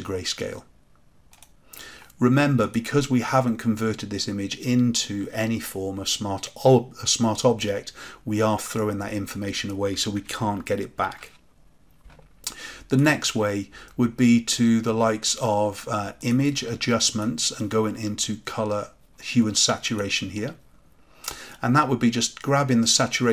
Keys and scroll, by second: 10.9 ctrl+z.